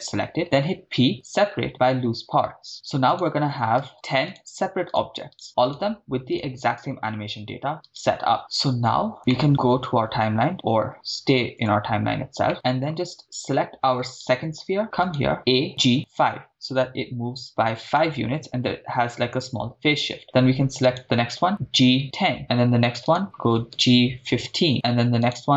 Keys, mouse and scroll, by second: 0.7 p, 3.2 right click, 3.9 Tab, 4.3 right drag, 5.4 right drag, 6.2 right click, 7.9 right click, 8.4 right click, 8.4-9.1 middle drag, 9.3 middle click, 11.7 click, 12.5-12.9 middle drag, 12.5 right click, 14.2 click, 14.2 right click, 15.1 click, 15.1 right click, 15.5 a, 15.8 g, 15.9 5, 17.4 Return, 18.1-19.4 middle drag, 21.0 right click, 21.7 g, 22.0 1, 22.0 0, 22.4 Return, 25.4 right click, 25.4 5.